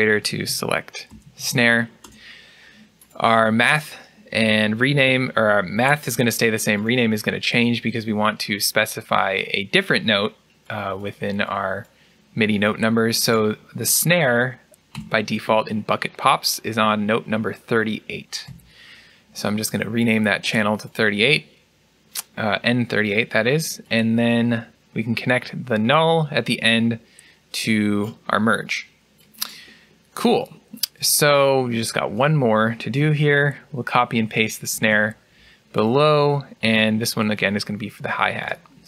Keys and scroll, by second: 0.3 typing, 1.9 Return, 1.9 typing, 14.8 BackSpace, 18.3 8, 33.1 ctrl+c, 34.6 ctrl+v.